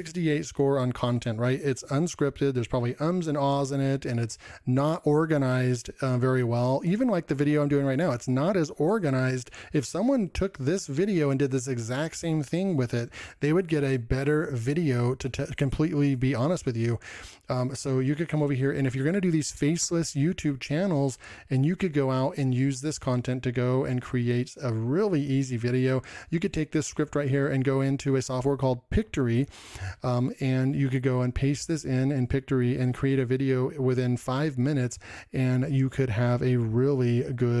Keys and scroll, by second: 26.7 ctrl+m.